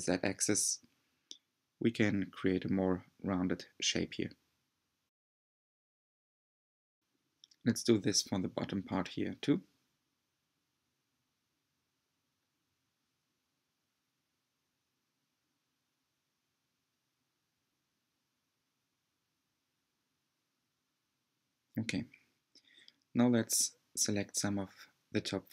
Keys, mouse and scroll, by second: 1.3-1.7 scroll down 1, 1.7-4.3 middle drag, 4.3 r, 6.7-8.7 middle drag, 8.7 g, 12.5-14.8 middle drag, 14.8 scroll down 2, 16.9 click, 18.8 alt+z, 22.9-24.2 drag, 24.2 alt+z.